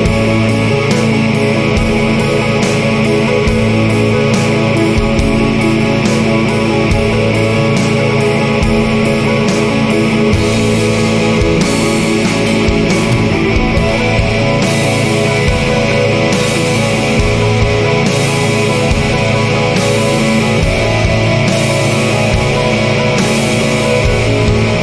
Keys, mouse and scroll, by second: 0.1-0.6 scroll down 2, 0.9 scroll up 2, 2.0 scroll up 2, 5.7 click, 6.9 scroll up 1, 9.0 click, 10.4 scroll up 1, 12.5 click, 13.7 scroll up 2, 15.5 click, 16.7 scroll up 2, 18.6 click, 19.2-19.6 scroll down 2, 19.9-20.3 scroll up 2, 21.3 scroll up 2, 23.0 click, 24.2 scroll up 2.